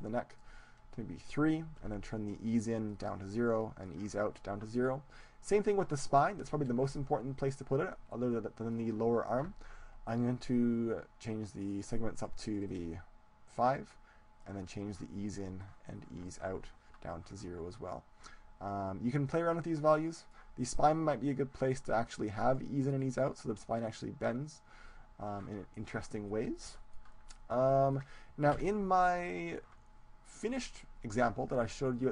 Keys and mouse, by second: 5.5-12.2 right drag, 12.2-17.5 drag, 19.3-22.7 drag, 24.9-26.3 drag, 26.3-29.5 middle drag, 28.6 KP_1.